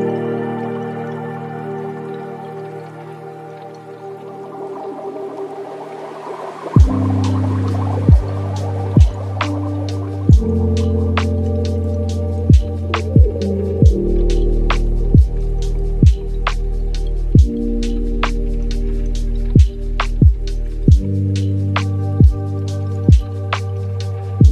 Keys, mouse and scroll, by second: 1.0-1.8 middle drag, 1.8 click, 2.2 x, 2.8 shift+a, 6.0-6.5 scroll up 2, 6.5-7.7 alt+right drag, 7.7-8.2 scroll up 4, 8.2-14.6 drag, 14.9-16.5 drag, 16.5 ctrl+x, 17.1 shift+a, 20.3 alt+right click, 21.1 scroll up 2, 21.5-23.8 drag.